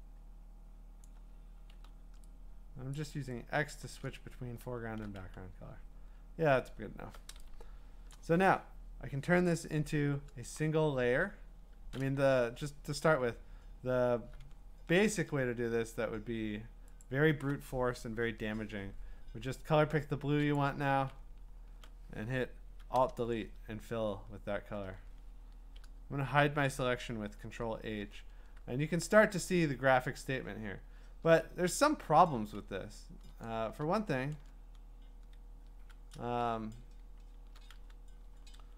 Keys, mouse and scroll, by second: 1.0 click, 1.7 x, 2.9 click, 3.7 click, 4.2-4.9 scroll down 16, 5.2 q, 5.7-7.1 scroll, 8.1 click, 9.8-10.1 scroll, 11.1 scroll, 12.3 b, 14.5-15.2 scroll, 17.0 alt+click, 20.6 alt+click, 21.1-21.7 alt+scroll, 23.0 alt+BackSpace, 24.6 scroll, 27.4 ctrl+h, 28.2-28.9 scroll, 28.9 scroll, 28.9 scroll down 4, 29.8 scroll down 1, 30.0-30.6 scroll down 5, 32.4 ctrl+z, 32.4-32.8 scroll, 33.5 scroll, 34.4 ctrl+z, 35.2 ctrl+z, 37.7 q, 38.4 scroll.